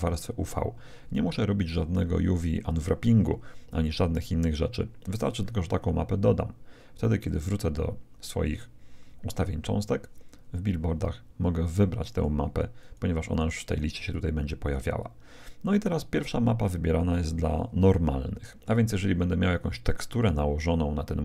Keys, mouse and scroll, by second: 7.2-8.9 drag, 12.0-15.0 drag.